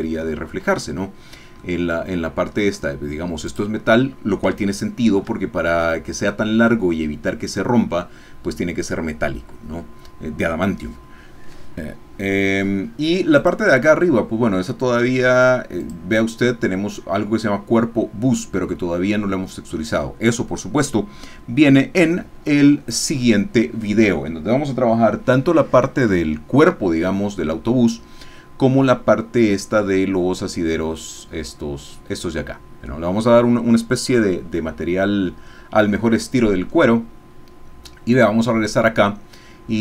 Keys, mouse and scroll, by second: 1.7 middle click, 3.6 click, 4.6 shift+middle click, 13.4 click, 15.8 click, 18.4 middle click, 38.1 click.